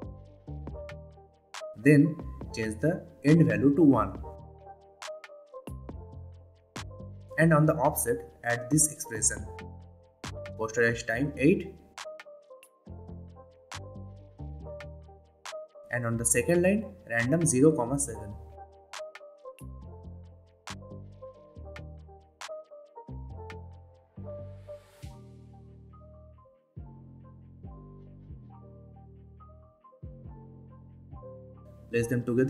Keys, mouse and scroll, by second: 4.1 Return, 8.2 click, 9.3 alt+click, 11.1-12.5 typing, 13.5 Return, 15.9 BackSpace, 16.1 ;, 16.9 Return, 18.5-19.8 typing, 20.9 click, 22.0 Return, 24.5 ,, 27.7-31.4 drag, 32.2-32.4 scroll up 2.